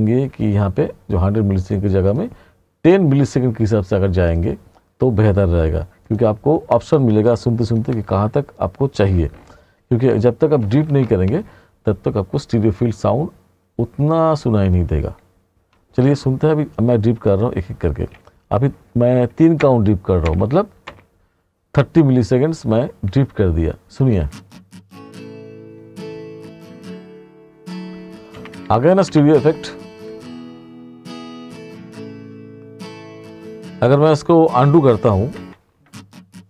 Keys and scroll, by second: 0.5 ,, 19.7 ., 24.1 space, 28.4 r, 35.4 ctrl+z.